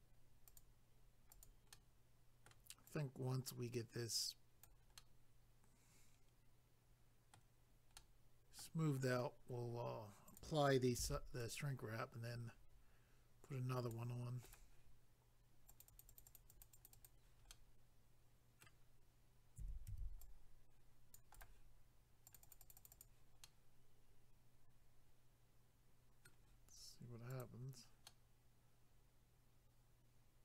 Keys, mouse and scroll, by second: 0.5 click, 0.6 click, 1.3 click, 1.4 click, 1.7 middle click, 2.9 click, 5.0 middle click, 8.1 middle click, 10.3 click, 10.4 click, 11.0 c, 11.4 click, 14.4 right click, 14.6 right click, 15.7 click, 15.8 click, 16.1 click, 16.2 double click, 16.3 click, 16.4 click, 16.5 click, 16.6 double click, 16.7 click, 16.9 click, 17.1 double click, 17.5 middle click, 19.4-20.5 typing, 20.2 click, 21.3 right click, 21.4 right click, 22.3 click, 22.4 click, 22.5 click, 22.5 click, 22.6 click, 22.7 double click, 22.8 click, 22.9 click, 23.0 double click, 23.4 middle click, 27.3 click, 27.4 click, 28.1 middle click.